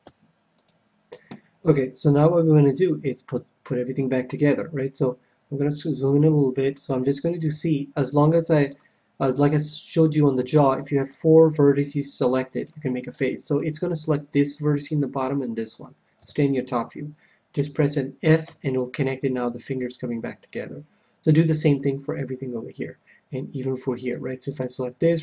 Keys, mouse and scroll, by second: 1.2 x, 5.2-7.7 middle drag, 7.4 c, 12.5-14.2 right drag, 13.0-14.8 middle drag, 16.2 KP_7, 17.5 f, 18.4 a, 24.0 c, 25.0-25.2 right drag.